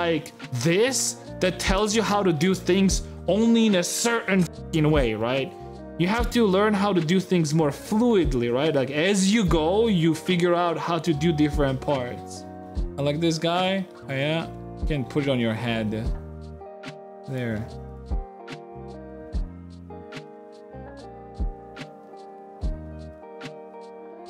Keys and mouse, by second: 13.4 shift+x, 13.6 shift+middle click, 14.0 Tab, 14.0 middle click, 14.9 Tab, 15.9 Tab, 15.9 a, 17.0 a, 17.0 g, 17.7 s, 18.0 click, 18.3 shift+click, 18.8 s, 19.3 g, 19.9 g, 21.1 s, 21.6 g, 21.8 Tab, 22.7 click, 23.4 Tab, 23.4 g, 23.8 Tab, 24.0-24.2 drag.